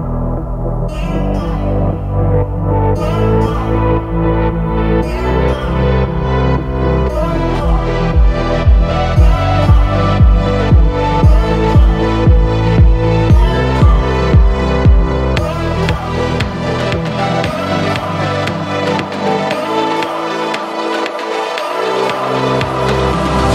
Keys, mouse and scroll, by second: 1.2 alt+click, 2.7 shift+click, 3.4 alt+shift+click, 4.0 alt+shift+click, 4.9-6.2 middle drag, 6.2 ctrl+KP_Add, 7.1-10.1 middle drag, 10.6-15.1 drag, 15.1-17.2 middle drag, 17.2 click, 17.9-19.9 middle drag, 19.9 click.